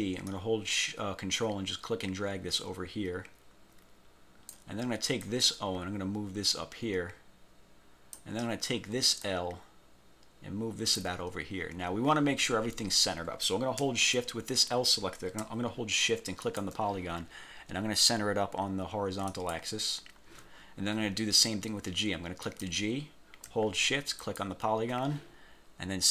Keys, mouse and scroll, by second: 0.4-4.8 ctrl+drag, 5.4-8.5 drag, 9.4-11.3 ctrl+drag, 16.6 shift+click, 19.4 click, 22.6 click, 24.3 shift+click.